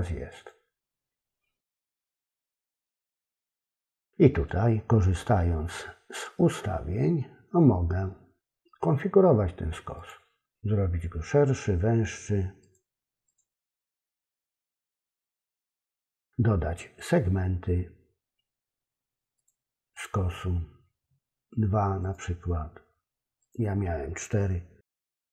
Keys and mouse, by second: 0.3 click, 10.0 click, 12.6 click, 15.5 click, 19.5 click, 19.9 click, 22.0 click.